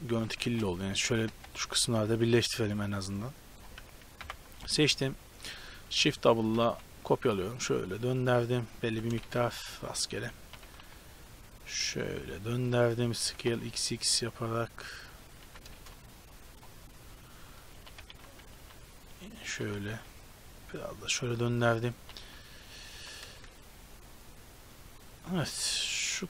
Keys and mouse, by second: 0.0-1.4 typing, 4.3 ctrl+l, 5.9 shift+d, 7.5 r, 8.9 g, 10.5 r, 13.3 s, 15.5 g, 17.8 r, 19.6 r, 22.1 r, 23.1 g, 25.7 z.